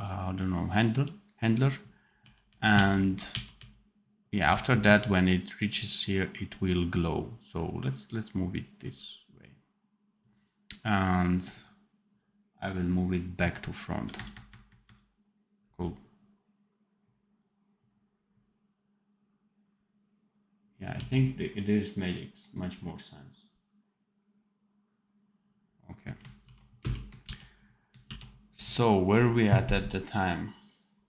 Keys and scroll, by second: 2.1 r, 2.7 r, 3.2 r, 4.4 r, 13.8 KP_Add, 14.4 KP_Add, 20.8 d, 26.4 ctrl+b, 26.7 space, 27.1 ctrl+b, 28.0 ctrl+s.